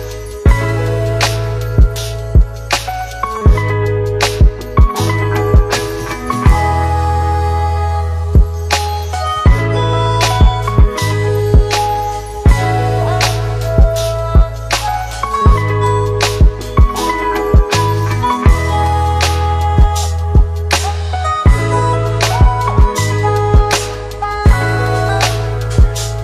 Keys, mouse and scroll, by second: 0.5-1.2 click, 13.9-14.9 click, 19.1 click, 21.2-23.0 typing, 23.3 Return, 25.5-26.2 click.